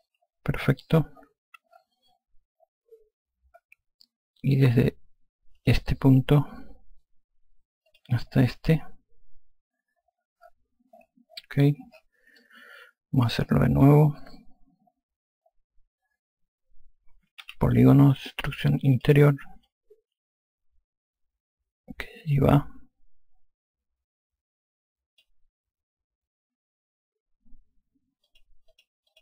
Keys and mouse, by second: 5.8 click, 8.1 click, 12.7 click, 17.7 3, 19.2 click, 28.5 click.